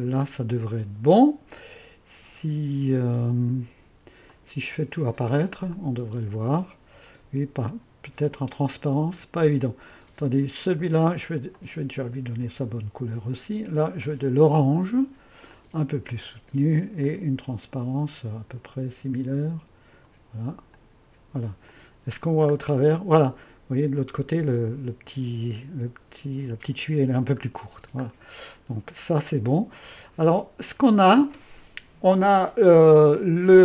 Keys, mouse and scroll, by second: 0.0-0.2 typing, 2.4-3.4 typing, 4.3 click, 4.9-6.1 typing, 5.8-6.8 drag, 11.6 click, 12.5 ⌨, 12.8 ctrl+d, 14.1-16.7 drag, 17.1-22.7 drag, 22.7-25.8 scroll up 1, 27.4-28.5 scroll down 1, 28.5 click, 31.8-33.6 drag.